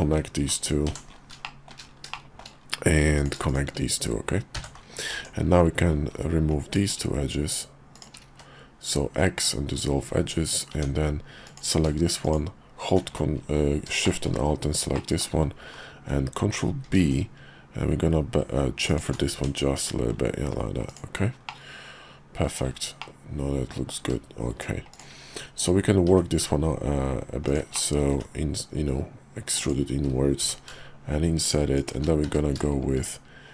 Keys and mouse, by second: 0.9 j, 1.4 shift+middle click, 1.9 shift+middle click, 3.1 click, 3.5 shift+click, 4.5 j, 5.1 Tab, 6.7 click, 7.9 shift+click, 8.3 x, 10.7 Tab, 11.4 alt+click, 12.2 alt+shift+click, 14.0 shift+middle click, 14.9 middle click, 16.8 ctrl+b, 19.3 Tab, 19.7 /, 20.9 click, 21.5-22.5 middle drag, 23.0 middle click, 24.5 Tab, 24.9 click, 26.1 i, 27.7 middle click, 28.1 e, 30.4 i, 32.2 q.